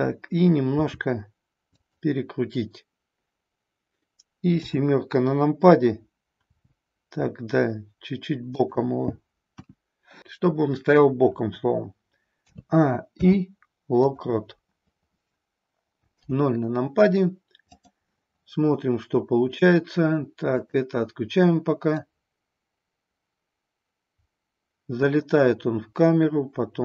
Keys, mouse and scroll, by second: 0.7 r, 1.7 click, 4.5 KP_7, 6.5 r, 8.5 click, 9.4 KP_1, 12.4 a, 13.1 i, 16.1 KP_0, 17.6 click, 20.5 click, 22.0-26.8 drag.